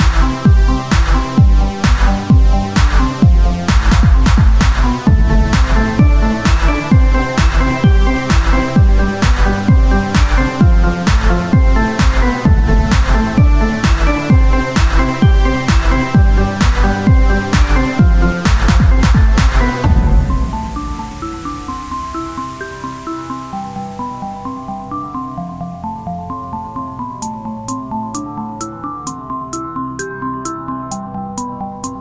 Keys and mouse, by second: 0.3 z, 0.6 c, 2.8-4.1 drag, 4.1 c, 5.1 z, 5.5 c, 6.9 z, 7.1-8.6 drag, 8.6 s, 10.6 Tab, 13.3-14.9 drag, 17.9 KP_3, 18.2 z, 18.4 c, 19.9 z, 20.5 o, 20.9 s, 25.2 Tab, 27.6 Tab, 28.6 KP_3, 29.3 z, 29.6 c, 31.1-32.0 drag, 31.5 e.